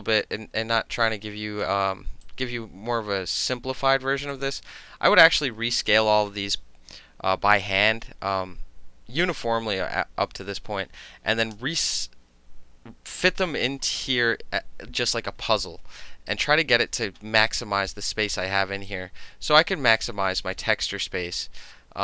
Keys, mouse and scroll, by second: 0.2-1.0 alt+middle drag, 1.0-1.6 alt+drag, 1.6-2.3 alt+middle drag, 2.3-3.5 drag, 3.5-4.3 middle drag, 4.3-5.1 drag, 5.1-6.6 middle drag, 16.3 alt+click, 17.5 click, 17.9-18.9 middle drag, 18.9-20.1 drag, 20.1 alt+middle click, 20.6 alt+middle click, 21.4-22.0 drag.